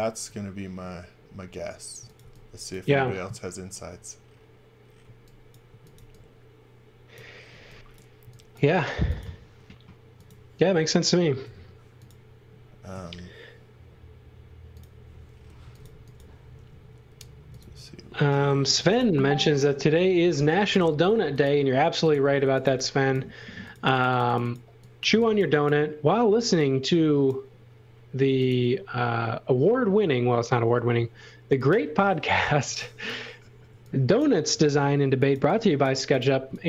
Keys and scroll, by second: 1.7-2.7 typing, 5.0 x, 5.7 x, 5.9 v, 7.5 x, 8.2 v, 9.0 x, 9.4 space, 11.4 m, 15.4-16.6 typing, 18.5-19.4 typing, 20.7 m, 22.2-23.2 typing, 24.8-26.2 typing, 28.3 m, 32.6 space, 33.7 x, 34.8-36.6 typing.